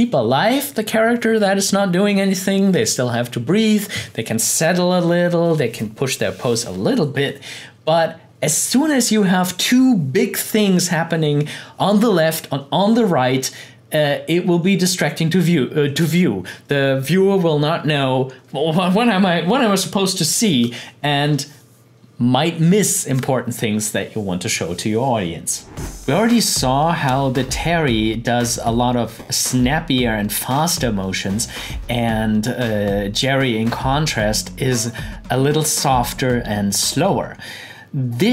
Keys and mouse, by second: 25.8 click.